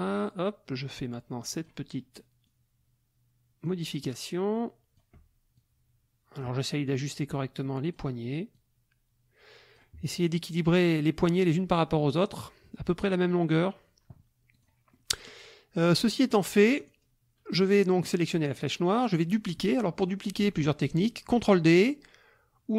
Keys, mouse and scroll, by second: 2.5-3.8 drag, 4.5 click, 5.6-6.6 drag, 7.1-8.1 drag, 8.5-10.0 drag, 14.5 click, 14.9 middle click, 14.9 click, 15.1 middle click, 15.2 click, 16.8 click.